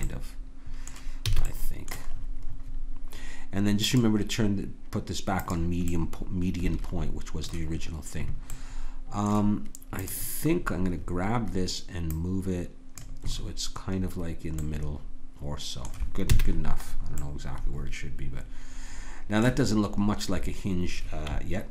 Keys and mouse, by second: 0.0 middle click, 1.3 a, 3.8-5.9 drag, 10.0-12.0 drag, 12.1-14.6 drag, 16.3 a, 17.0-19.5 middle drag.